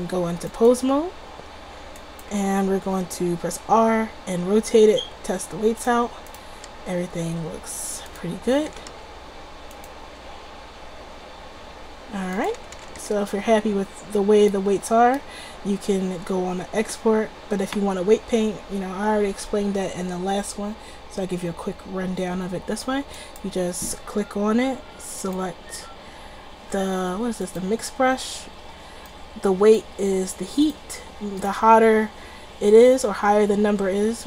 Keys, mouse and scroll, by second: 0.4-2.1 drag, 3.0 r, 3.8 click, 3.9-6.3 middle drag, 6.4-8.6 drag, 6.7 r, 8.6 middle click, 8.6 a, 8.8 a, 9.0 alt+r, 9.8 click, 10.3 r, 11.4 click, 12.7 a, 12.9 a, 13.1 alt+r, 16.1 drag, 23.3-24.8 drag, 24.8-25.3 middle drag, 26.9 click.